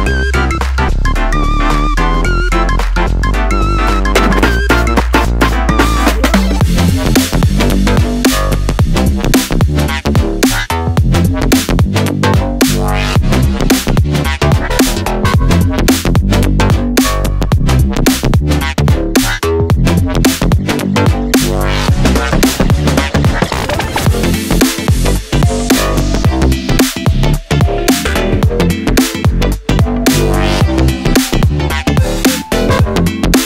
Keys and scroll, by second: 15.8 Right, 15.8 Right, 16.1 Right, 20.3 ctrl+d.